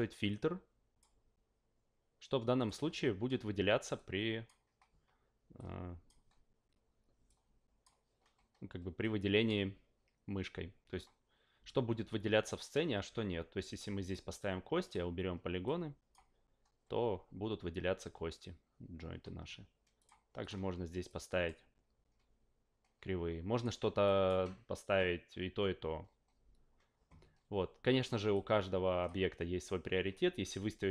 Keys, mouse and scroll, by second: 0.3 click, 2.6 click, 3.9 click, 5.6 click, 7.2 click, 9.0-9.4 drag, 14.0 click, 14.8 click, 15.6 click, 20.0 click, 20.4 click, 21.1 click, 23.5 click, 24.0 click, 28.3 click.